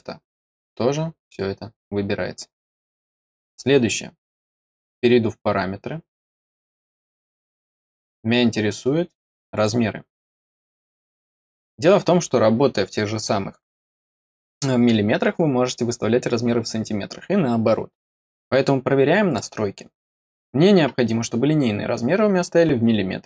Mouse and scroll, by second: 2.6 click, 4.1 click, 9.4 click.